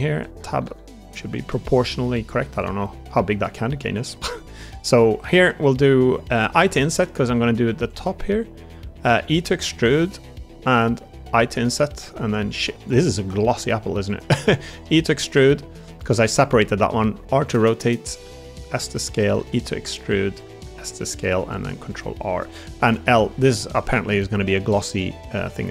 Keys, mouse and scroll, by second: 0.3 Tab, 0.3 a, 0.5 s, 2.8 middle click, 3.2 shift+middle click, 3.6 middle click, 4.2 middle click, 4.5 3, 6.4 i, 11.1 e, 11.1 i, 12.5 shift+d, 13.2 s, 14.4 e, 15.4 click, 15.9 shift+middle click, 16.9 r, 17.5 g, 18.1 s, 19.3 e, 20.2 click, 20.5 s, 21.0 click, 21.6 ctrl+r, 23.1 l, 23.8 a, 24.1 g, 25.1 click, 25.6 g.